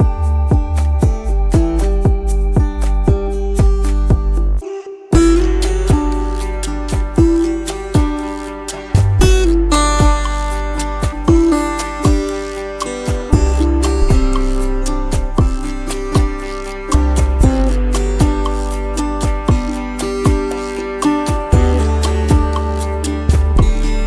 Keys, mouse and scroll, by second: 10.7 space, 11.0 double click, 11.2 space, 13.4 double click, 13.6 space.